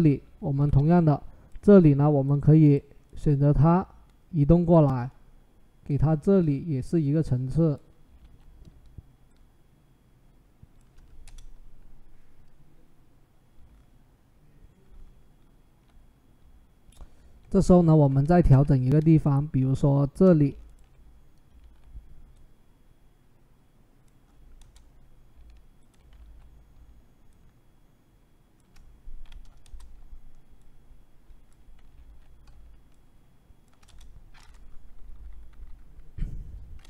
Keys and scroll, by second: 8.0 ctrl+t, 11.0 Return, 21.4 ctrl+t, 24.4 Return, 26.0 ctrl+t, 29.4 Return, 31.9 ctrl+t, 33.6 Return, 34.7 Down, 34.9 Down, 35.1 Down, 35.3 Down, 35.4 Down, 35.9 Up.